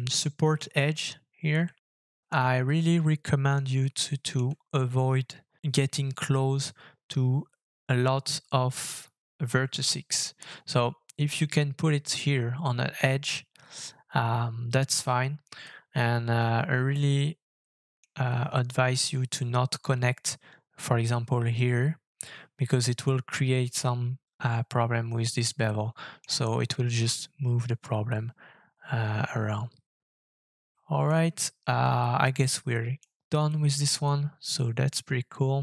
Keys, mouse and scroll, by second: 0.1 shift+middle click, 1.8 shift+middle click, 2.3 scroll up 3, 2.8 shift+middle click, 4.0 shift+middle click, 15.6 shift+middle click, 19.0 shift+middle click, 25.6 middle click, 26.5-27.3 scroll down 2, 28.1 shift+middle click, 30.6 middle click, 32.0 shift+middle click, 32.7 shift+middle click, 33.5 shift+middle click.